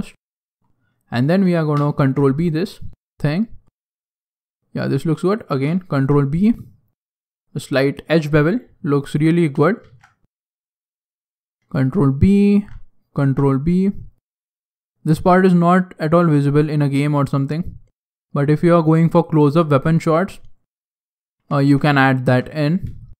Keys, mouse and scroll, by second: 0.1 click, 1.1 alt+right click, 1.9 ctrl+b, 5.2 alt+right click, 5.9 ctrl+b, 7.5-8.0 scroll down 4, 8.0 middle click, 9.0 alt+right click, 9.8 ctrl+b, 12.3 alt+right click, 13.4 ctrl+b, 15.6 middle click, 17.2 right click, 18.7 click, 19.2 right click, 19.9 click, 21.6 ctrl+z, 21.8 middle click, 22.2 Tab, 22.6 scroll down 2, 22.7 scroll down 3, 22.9 shift+middle click.